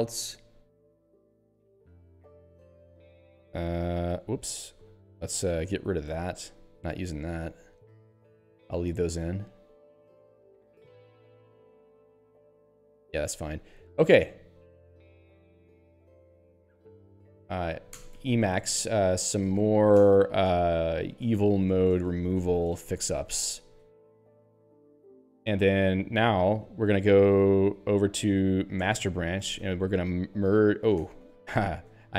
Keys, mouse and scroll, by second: 0.4 n, 1.5 p, 2.3 Tab, 3.3 n, 4.4 p, 6.1 k, 7.2 y, 9.2 p, 10.1 n, 10.5 Tab, 11.2 n, 12.0 Tab, 14.7 p, 15.5 c, 17.3-23.9 typing, 24.8 ctrl+c, 27.6 b, 28.9 Return, 30.0 m, 31.1 ctrl+g, 31.8-32.1 typing.